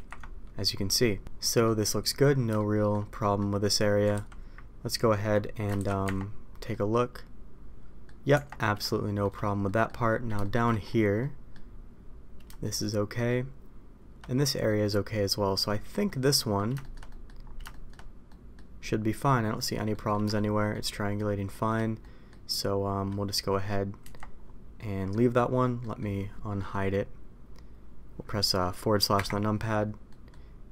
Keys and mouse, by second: 1.6 middle click, 2.5 shift+middle click, 3.0 middle click, 4.1 ctrl+z, 5.7 ctrl+shift+z, 6.0 Tab, 6.6-8.1 middle drag, 8.3 Tab, 8.8 shift+middle click, 9.7 middle click, 10.4 middle click, 11.1 middle click, 12.6 shift+middle click, 14.6 middle click, 15.6 middle click, 16.3 middle click, 16.7 shift+middle click, 17.0 middle click, 17.6 shift+middle click, 18.2 middle click, 19.2 middle click, 19.9 middle click, 20.3 shift+middle click, 21.1 shift+middle click, 22.0 middle click, 24.0 Tab, 24.7-25.0 middle drag, 25.7 middle click, 29.1 KP_Divide, 30.0 middle click.